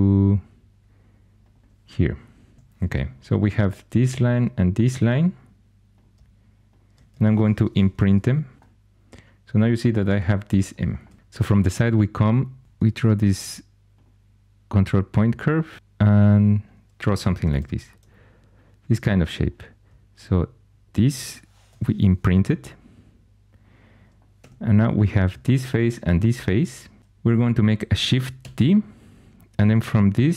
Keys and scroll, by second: 2.5 2, 7.6 Caps_Lock, 12.6 ctrl+super+c, 17.5 2, 21.6 Caps_Lock, 24.3 3, 28.3 shift+d.